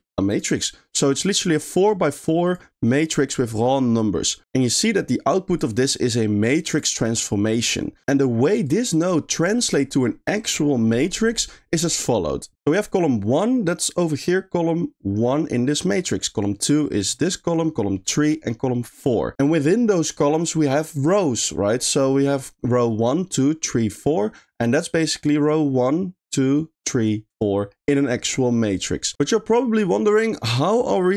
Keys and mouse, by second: 0.3 click, 0.7 middle click, 1.5 middle click, 2.2 click, 2.5 click, 3.2 middle drag, 4.4 middle click, 4.8 middle click, 5.7-6.7 drag, 8.7 click, 9.6 click, 11.4 middle click, 12.6 middle click, 22.3 click, 30.4 middle click, 30.9-31.1 drag.